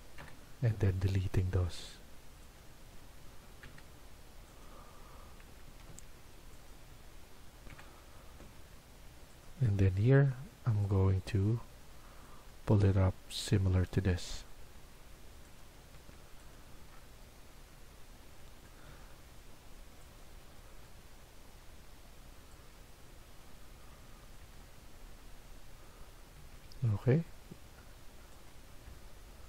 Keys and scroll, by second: 0.1 Delete, 3.5 Delete, 5.7 Escape, 5.8 Escape, 7.7 Delete, 12.9 Escape, 15.9 Escape, 18.7 Escape, 24.1 Escape, 26.3 Escape, 26.5 Escape.